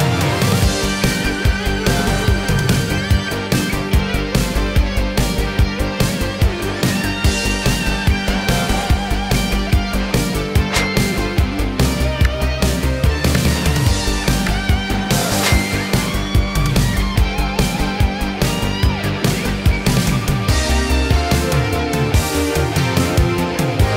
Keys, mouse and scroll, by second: 1.3-2.9 drag, 11.1-11.5 scroll down 1, 11.5 space, 14.9 space, 15.7-16.2 scroll up 1, 16.2-17.2 middle drag, 17.6-20.1 drag.